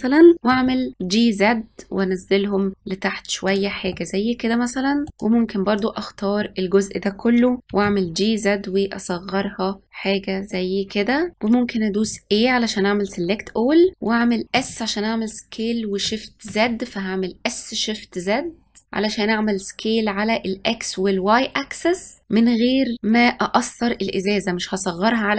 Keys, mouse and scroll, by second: 0.4 g, 3.8-5.1 middle drag, 5.1 click, 11.9 a, 14.4 s.